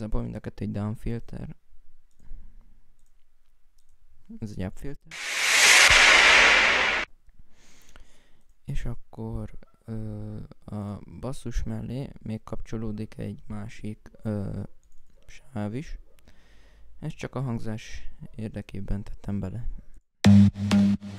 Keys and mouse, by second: 1.8 right click, 2.7 right click, 8.1 right click, 8.6 right click.